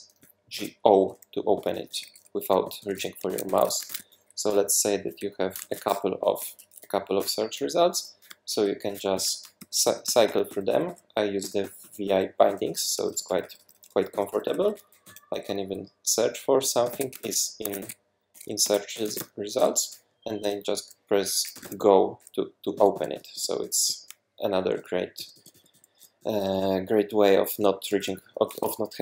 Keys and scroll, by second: 0.2-3.3 typing, 3.5 super+w, 3.9 shift+super+f, 4.4 Left, 4.8 alt+Right, 5.6 shift+super+Left, 5.9 =, 6.4 BackSpace, 7.2 Return, 9.1 super+b, 9.6-15.5 typing, 16.6-19.7 typing, 21.3-29.0 typing.